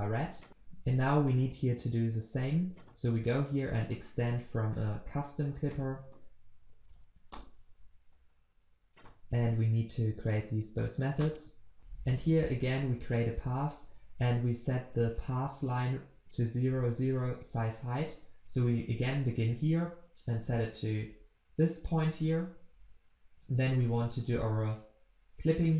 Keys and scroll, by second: 0.5 ctrl+alt+Left, 2.9 ctrl+b, 4.2 ctrl+v, 5.9 ctrl+v, 6.1 alt+Return, 11.8 ctrl+z.